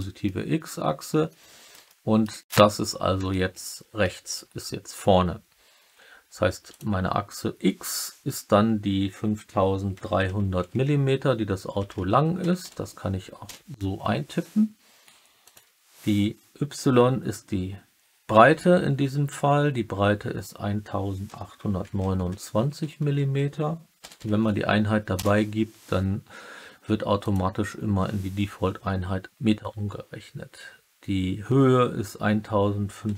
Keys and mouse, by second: 0.2-0.9 alt+middle drag, 1.2-1.6 middle drag, 1.8-2.2 alt+middle drag, 3.2 alt+middle click, 4.0-4.3 middle drag, 6.6-15.0 drag, 11.9 0, 12.6 m, 15.4-26.5 drag, 24.1 m, 27.1-33.1 drag.